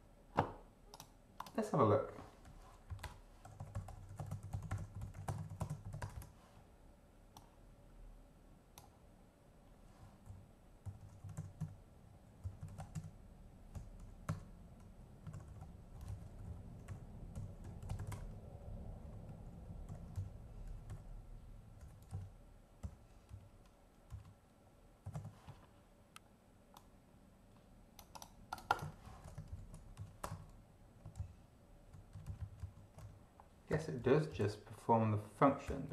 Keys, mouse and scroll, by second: 0.9 click, 1.4 click, 2.4-6.3 typing, 2.9 Right, 3.0 Return, 7.3-8.9 drag, 9.9-21.8 typing, 20.1 shift+Left, 22.1 Left, 22.9 ., 23.3 Right, 24.1 Right, 25.1 ,, 25.1 space, 26.7-28.4 drag, 28.5 click, 29.1 ctrl+shift+v, 29.5 BackSpace, 29.9 ctrl+shift+Right, 30.2 ctrl+shift+BackSpace, 30.3 ctrl+shift+1, 31.1 ctrl+Left, 32.1 ctrl+Right, 33.7 [, 34.0 End, 34.3 Left, 35.6 ].